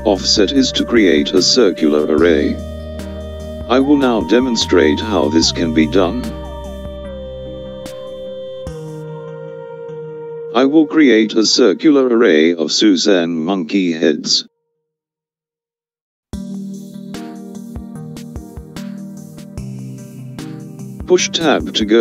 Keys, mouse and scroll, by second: 6.7 ctrl+r, 11.9 click, 21.3 Tab.